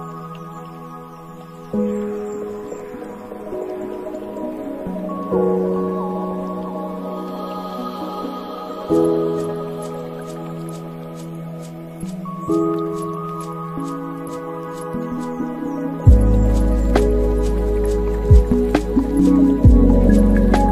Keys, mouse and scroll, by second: 4.6-7.9 drag, 7.9 shift+a, 9.7 s, 13.2 click, 14.8-16.1 drag, 16.1 scroll down 8, 16.6-17.9 middle drag, 17.9 click, 18.7 shift+a.